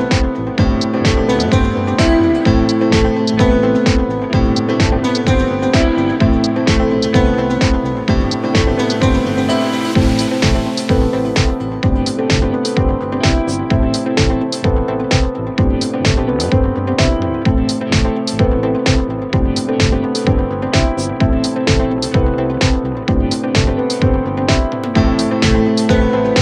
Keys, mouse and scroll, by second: 0.1-0.4 alt+scroll up 2, 0.7 space, 1.0 click, 1.1 space, 1.8-9.2 drag, 6.3-7.0 shift+click, 7.4 shift+drag, 9.5-11.6 shift+drag, 13.0 alt+scroll down 1, 13.9-14.2 alt+scroll up 1, 14.5-15.2 shift+click, 15.5-16.7 alt+scroll down 1, 18.1 alt+scroll up 1, 18.3 space, 18.4 click, 18.7 space, 19.5 click, 21.8-25.3 typing, 25.5 ctrl+a.